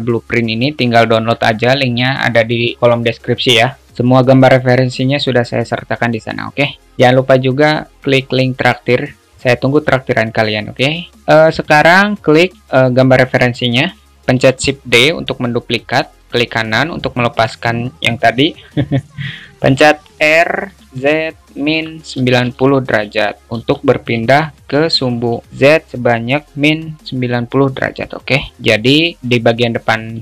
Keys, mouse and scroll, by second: 12.6 drag, 14.7 shift+d, 24.5-25.5 alt+middle drag.